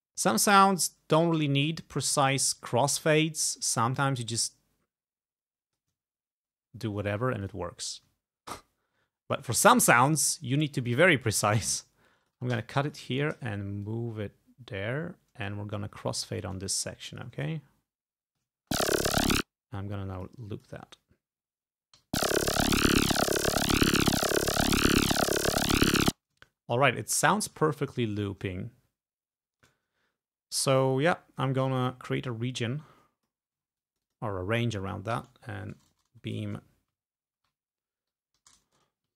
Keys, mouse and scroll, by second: 2.6 ctrl+scroll up 2, 6.6 ctrl+scroll down 2, 7.5 click, 8.3 ctrl+scroll down 2, 8.6 ctrl+scroll up 2, 9.5 ctrl+scroll up 2, 12.3 click, 12.5 s, 12.9 shift+click, 13.2 shift+right click, 13.9-15.7 drag, 16.6 click, 17.5 ctrl+scroll down 2, 18.2 ctrl+scroll down 2, 18.6 ctrl+space, 19.0 ctrl+scroll down 2, 19.3 ctrl+space, 20.2 click, 22.0 l, 26.0 space, 26.7-27.2 ctrl+scroll up 2, 27.2 ctrl+scroll up 2, 28.6 ctrl+scroll down 2, 29.3 ctrl+scroll down 2, 30.5 ctrl+scroll up 2, 31.9-33.5 ctrl+drag, 33.8 ctrl+click, 35.2 ctrl+v, 35.6 ctrl+BackSpace, 37.4-39.1 typing.